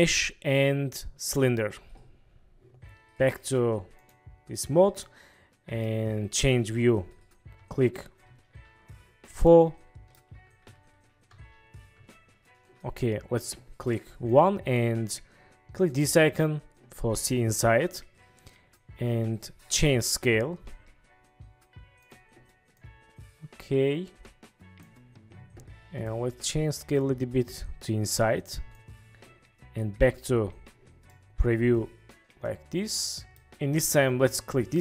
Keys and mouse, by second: 5.1-6.0 drag, 6.8 KP_4, 7.7 KP_5, 8.3 KP_6, 9.6-10.3 drag, 10.4 KP_6, 11.4 KP_3, 11.4 KP_2, 12.1 KP_1, 15.9 click, 20.3 s, 22.1 click, 26.1 click, 27.1 click, 27.3 right click, 31.3-33.5 middle drag, 34.5 click, 34.5 middle click.